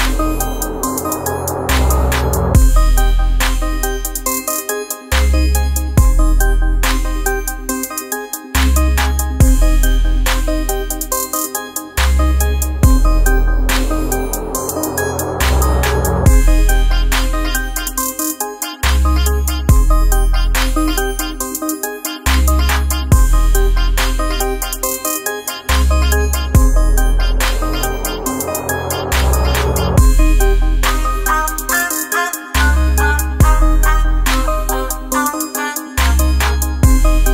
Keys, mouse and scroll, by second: 17.6 Right, 20.8 Right, 21.1 shift+click, 24.0 right click, 25.8 click, 27.4 space, 27.6 click, 28.0 space, 28.8 alt+scroll down 1, 29.2 space, 29.4 click, 29.7 space, 30.0-34.0 ctrl+drag.